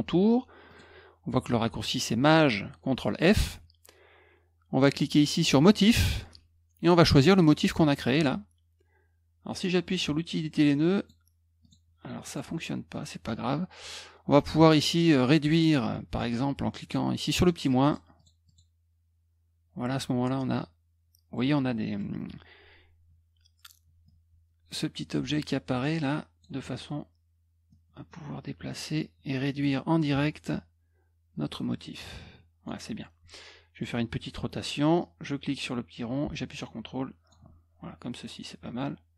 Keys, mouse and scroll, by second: 0.6 click, 5.7 click, 7.6 click, 9.8 click, 10.9 click, 11.6 click, 12.2 click, 15.9 click, 17.2 click, 17.5 click, 17.8 click, 18.1 click, 18.4 click, 21.4 middle click, 21.4 scroll down 1, 24.0-26.4 drag, 27.7-28.7 drag, 30.1-32.6 ctrl+drag, 35.0-37.3 drag, 38.6 middle click, 38.6 scroll up 1.